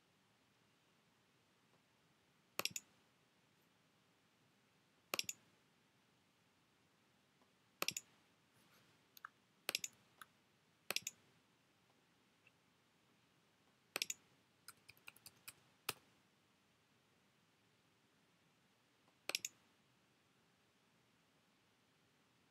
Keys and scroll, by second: 9.3 Up, 14.7 BackSpace.